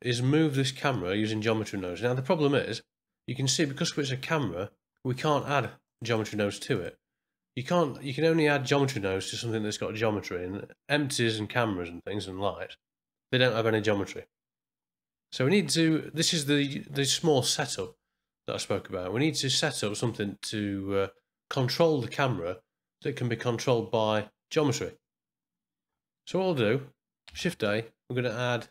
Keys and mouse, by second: 5.1 click, 5.4 click, 5.8 click, 6.2 click, 6.6 click, 27.3 shift+a.